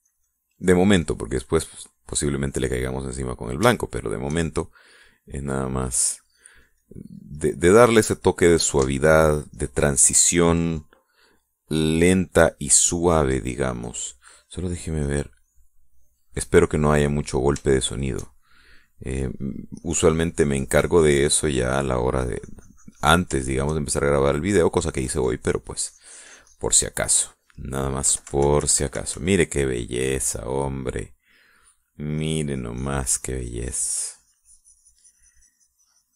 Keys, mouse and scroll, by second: 4.1-5.1 shift+middle drag, 5.8-11.1 drag, 13.7-15.2 drag, 16.0 click, 17.3 click, 18.7 shift+middle click, 19.7 shift+middle click, 20.3 shift+middle click, 20.8-22.8 drag, 22.8-24.2 middle drag, 23.1-24.2 drag, 24.3 shift+middle click, 24.8 shift+middle click, 25.9-27.7 drag, 28.6 middle click, 29.0 KP_Subtract, 31.0 middle click, 31.9 middle click, 32.4-32.8 scroll up 1, 33.1-36.1 drag.